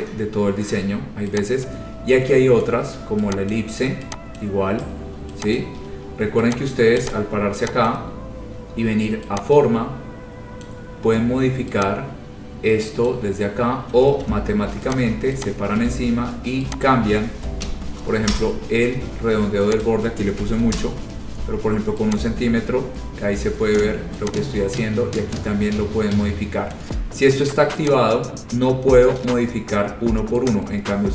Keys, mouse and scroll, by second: 2.7 click, 3.7 ctrl+click, 4.5 click, 5.7 click, 6.7 click, 7.3 click, 8.1 click, 8.3 scroll, 10.8 click, 13.2 click, 14.1 ctrl+z, 15.1 click, 15.7 click, 17.0 click, 17.8 5, 18.5 Return, 20.0 click, 20.5 1, 20.9 Return, 22.3 click, 23.0-23.7 typing, 26.9 click, 28.1 click.